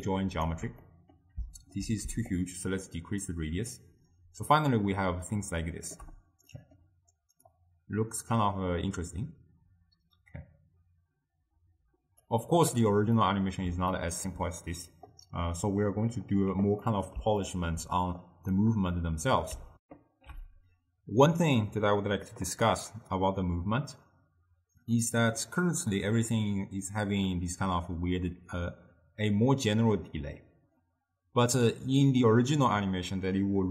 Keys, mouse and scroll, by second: 0.1-1.0 alt+right drag, 1.0-2.4 middle drag, 2.4-5.6 shift+drag, 6.6 middle click, 7.6-10.6 drag, 13.3-18.3 middle drag, 18.3 click, 19.9 ctrl+alt+shift+w, 22.8 ctrl+alt+shift+q, 25.0-26.2 middle drag, 26.2-29.3 drag.